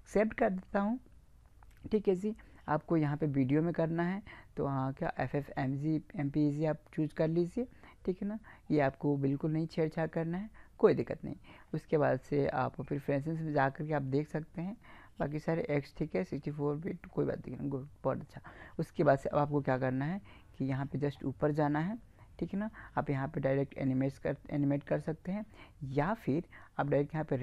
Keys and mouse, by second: 3.1-4.8 drag, 13.0-14.7 drag.